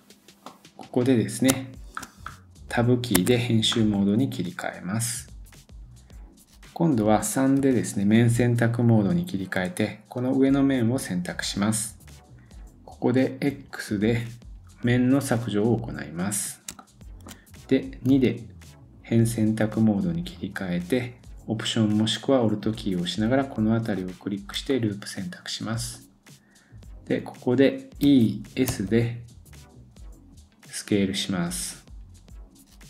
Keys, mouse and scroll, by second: 0.5 middle click, 1.5 shift+middle click, 2.2-3.1 scroll up 1, 3.1 Tab, 3.7 middle click, 10.1 click, 16.8 shift+middle click, 18.1 2, 19.9 click, 20.3-20.8 scroll up 1, 22.6-24.5 alt+drag, 23.9 alt+right click, 24.7-26.1 middle drag, 27.0 middle click, 27.7-32.8 drag.